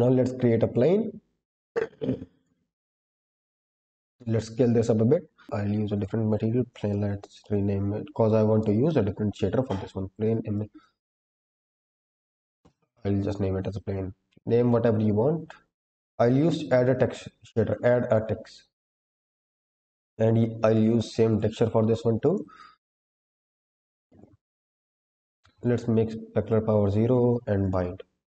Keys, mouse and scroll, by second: 1.0 shift+a, 3.4 s, 4.7 click, 5.4 scroll up 10, 5.8-12.5 drag, 11.4 BackSpace, 13.5-15.6 scroll down 12, 15.6-18.0 drag, 18.9 drag, 23.0 click, 24.2-24.6 scroll down 1, 24.7 click, 25.2-26.0 scroll down 2, 27.0 scroll up 2, 27.5 click.